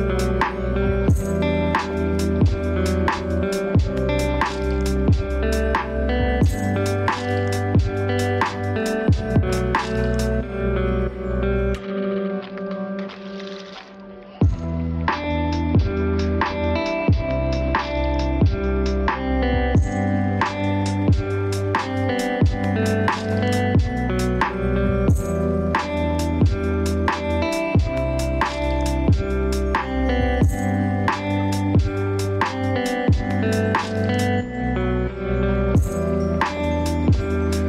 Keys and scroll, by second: 5.2 ctrl+space, 21.4 ctrl+space, 27.3 ctrl+space, 33.3 ctrl+space, 37.2 ctrl+d.